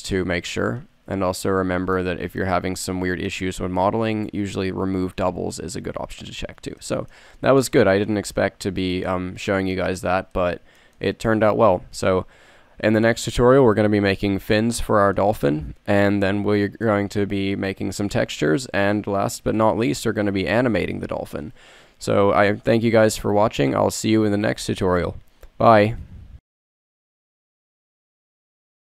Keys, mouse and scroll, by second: 5.7 KP_1, 5.8 KP_1.